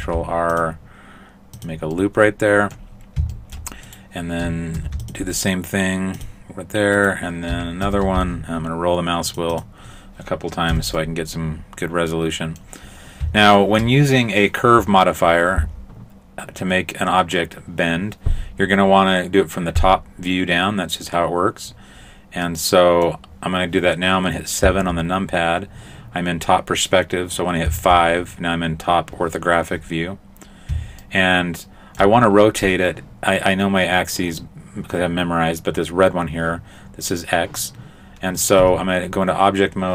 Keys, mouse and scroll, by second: 0.0 ctrl+r, 2.0 middle click, 3.0 scroll up 1, 3.4 shift+middle click, 3.9 right click, 4.8 ctrl+r, 7.0 right click, 7.9 ctrl+r, 10.8 a, 11.0 middle click, 12.9-13.6 scroll down 1, 13.6 shift+middle click, 13.6-14.0 scroll down 1, 22.5 middle click, 24.7 KP_7, 27.7 KP_5, 31.1 shift+middle click, 38.6 Tab.